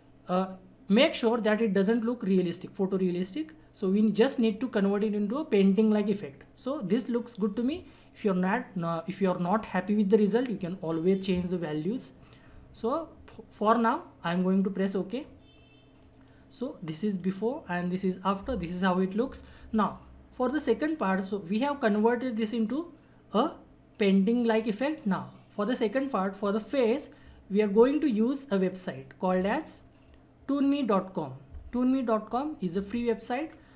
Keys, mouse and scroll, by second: 14.5 click, 14.7 click, 29.5 click, 33.5 scroll down 1.